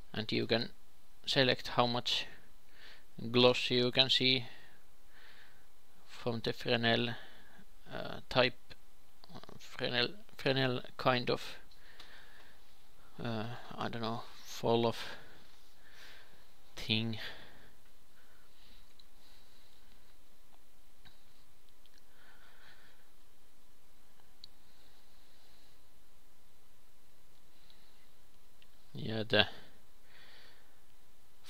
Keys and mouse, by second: 2.7 shift+f, 12.2-18.7 drag, 18.8 shift+f, 22.3 ctrl+s, 23.3 alt+shift+z, 28.6 x, 29.1 shift+a, 30.6 alt+g, 30.9 alt+g, 30.9 shift+a.